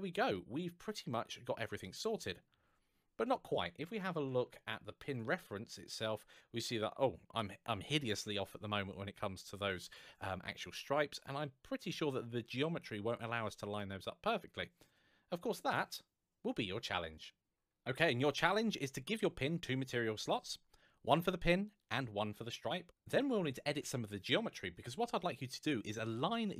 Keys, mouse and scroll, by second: 3.9-4.8 scroll down 1, 4.8 click, 5.5 middle click, 11.0 middle click, 13.5 middle click.